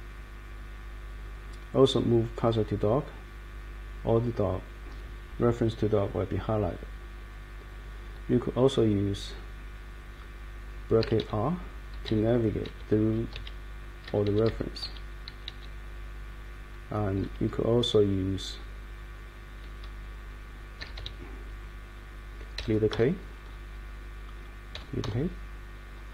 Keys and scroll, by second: 1.9 Up, 2.4 Down, 10.7-15.9 typing, 20.5-21.4 typing, 22.5-23.4 typing, 24.7 \.